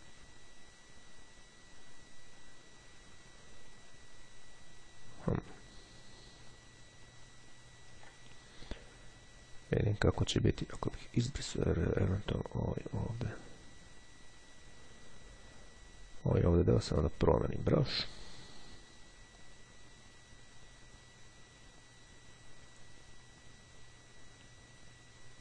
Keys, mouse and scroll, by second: 5.9-6.4 ctrl+scroll down 2, 6.5-7.0 ctrl+scroll up 2, 7.3-7.8 ctrl+scroll up 2, 11.0 click, 13.4 click, 18.0 click, 19.5-25.4 drag.